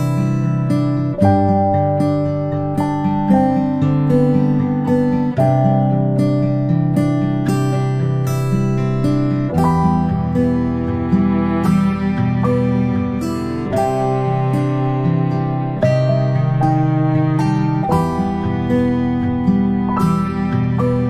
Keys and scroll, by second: 13.0 ctrl+space, 13.3 ctrl+space, 16.0 space, 16.2 space, 16.3 space.